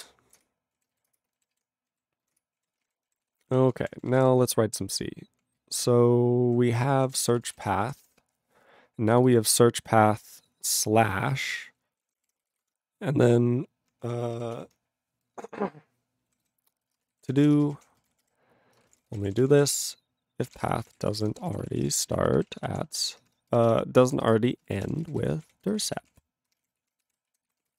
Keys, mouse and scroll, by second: 0.4 ctrl+Return, 1.2 Return, 2.4 ctrl+Return, 2.6 ctrl+a, 2.8 ctrl+space, 2.8 ctrl+g, 3.2 ctrl+s, 3.3 ctrl+p, 3.5 ctrl+p, 3.6 ctrl+p, 3.7 ctrl+space, 3.8 ctrl+e, 3.9 ctrl+n, 4.1 ctrl+e, 4.2 ctrl+g, 4.4-5.4 ctrl+p, 5.6-6.5 ctrl+n, 6.6 ctrl+e, 6.8 ctrl+p, 7.0 ctrl+p, 7.0 ctrl+a, 7.1 ctrl+space, 7.2 ctrl+e, 7.4 ctrl+n, 7.5 ctrl+e, 7.6 ctrl+g, 8.0 ctrl+s, 9.1 click, 9.2 click, 9.3 click, 9.4 double click, 9.9 click, 10.3 click, 10.4 click, 10.4 click, 10.5 double click, 10.9 click, 11.1 click, 11.4 click, 11.5 click, 12.1 ctrl+a, 12.1 ctrl+o, 12.2 Tab, 12.2-13.2 typing, 14.1 ctrl+a, 14.3 ctrl+k, 14.6 Tab, 16.4-27.2 typing, 24.3 ctrl+BackSpace, 24.3 ctrl+BackSpace, 27.6 ctrl+s, 27.6 ctrl+a, 27.7 ctrl+space.